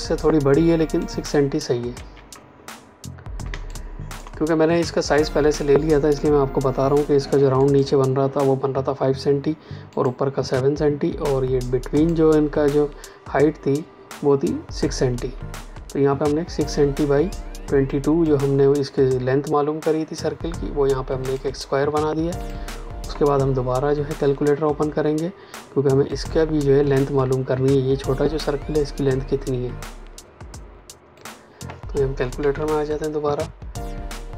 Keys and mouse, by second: 1.9 ctrl+z, 3.4 space, 3.6 click, 3.9 space, 7.5 click, 17.8 click, 21.2 click, 26.0 click, 31.1 click, 32.3 Escape.